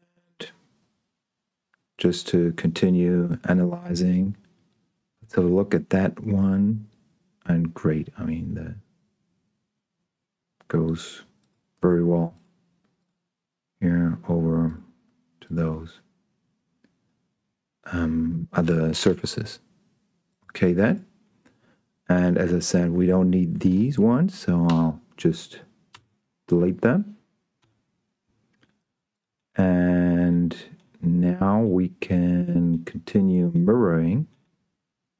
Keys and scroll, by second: 24.9 Delete, 27.5 Escape.